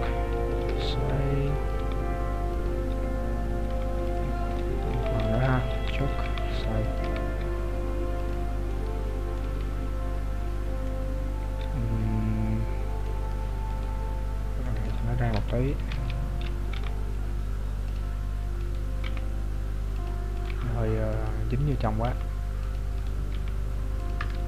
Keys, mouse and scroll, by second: 7.0 r, 8.7 middle click, 9.4 z, 9.8-10.3 scroll down 1, 10.4-10.9 scroll down 3, 11.0 middle click, 13.7 right click, 14.7 middle click, 15.4 KP_7, 15.9 z, 16.4-17.0 scroll up 3, 16.8 g, 18.6 right click, 19.1 g, 20.3 right click, 20.5 g, 21.8 right click, 22.1 g, 23.1 right click, 23.5 g.